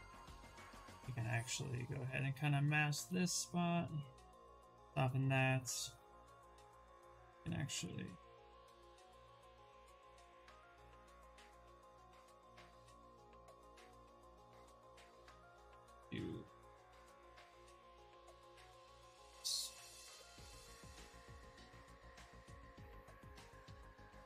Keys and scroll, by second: 1.7 ctrl+space, 3.9 w, 7.4 ctrl+z, 7.7 q, 20.3 w.